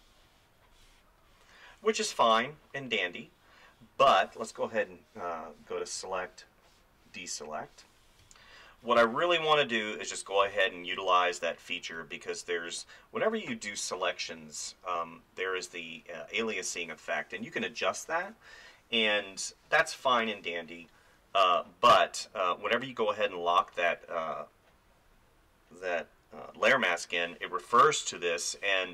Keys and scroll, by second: 8.2 space, 10.5 space.